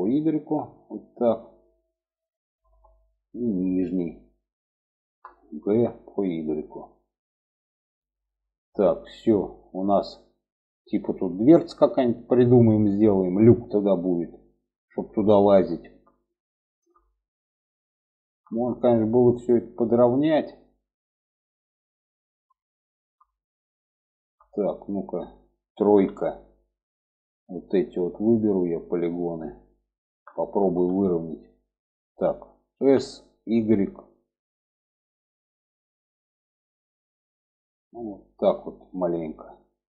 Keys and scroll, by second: 5.0 g, 25.2 3, 32.0 s.